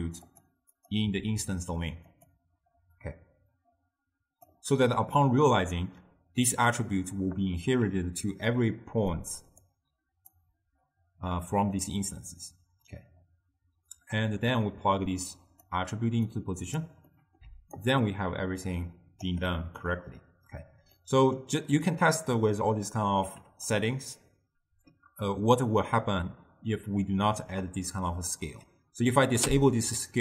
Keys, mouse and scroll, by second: 0.9-6.8 drag, 7.9-10.6 typing, 8.7 click, 9.8 click, 12.7 d, 14.1-16.5 drag, 17.2 middle click, 17.6 d, 17.9-19.4 right drag, 19.4 d, 19.6 d, 19.7-22.0 middle drag, 22.0 click, 23.1 click, 27.8 click, 29.5 m.